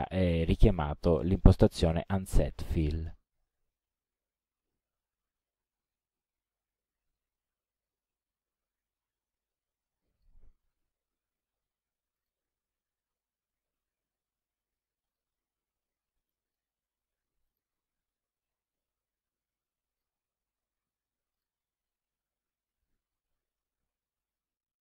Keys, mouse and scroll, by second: 3.5 click, 10.3 click, 11.5 KP_1, 11.6 KP_0, 12.6 click, 15.2 click, 16.1 KP_5, 16.7 click, 17.1 KP_5, 17.9 click, 20.1 click, 20.9 KP_1, 21.0 KP_0, 21.8 click.